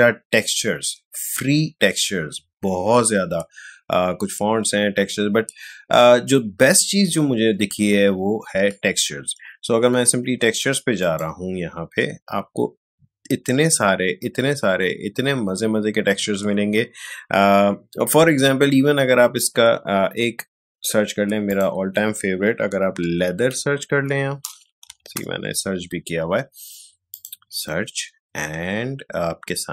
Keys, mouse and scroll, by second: 2.1 scroll down 2, 11.0 click, 12.6 scroll down 2, 16.2 scroll down 2, 19.2 scroll up 2, 21.4 click, 22.7-24.0 typing, 24.8 Down, 25.1 Return, 27.1 click.